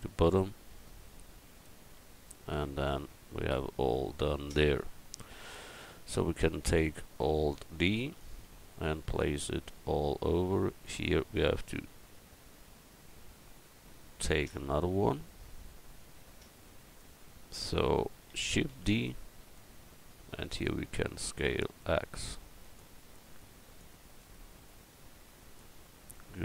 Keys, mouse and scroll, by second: 3.1 Tab, 8.0 alt+d, 18.7 shift+d, 21.0 s, 26.3 middle click.